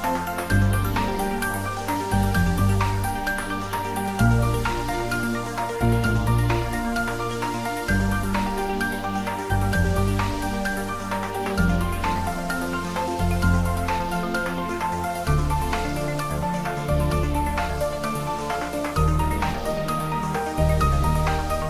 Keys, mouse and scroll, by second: 1.4-7.1 shift+drag, 7.1-12.9 shift+drag, 18.5-19.6 scroll up 1, 19.8 shift+click, 20.0 shift+right click, 20.5 shift+click.